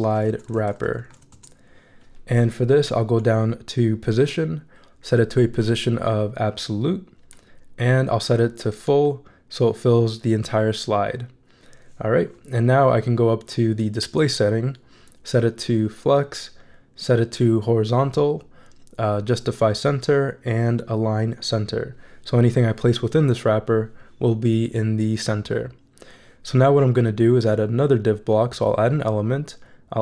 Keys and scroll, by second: 0.0-1.6 typing.